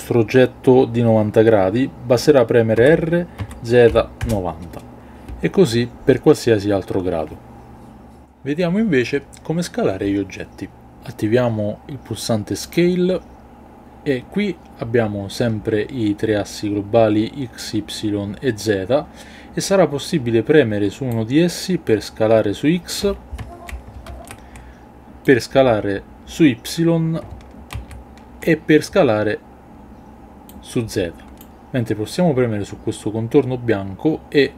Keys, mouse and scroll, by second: 2.8 r, 3.4 z, 3.8 KP_9, 4.2 KP_0, 12.7 click, 21.1-23.0 drag, 24.1 ctrl+z, 25.2-26.7 drag, 27.8 ctrl+z, 30.5-31.4 drag.